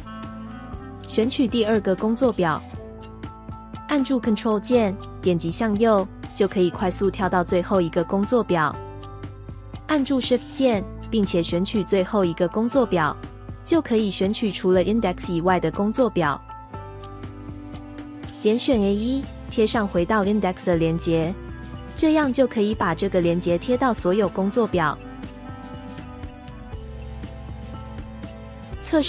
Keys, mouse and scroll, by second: 18.6 ctrl+v.